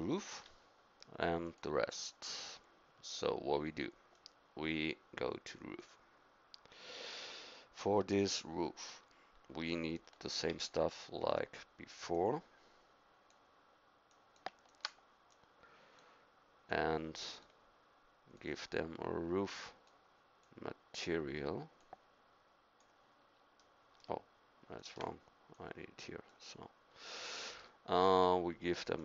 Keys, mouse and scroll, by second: 4.1-5.8 drag, 10.5 ctrl+v, 12.1-13.3 drag, 18.5-20.5 drag.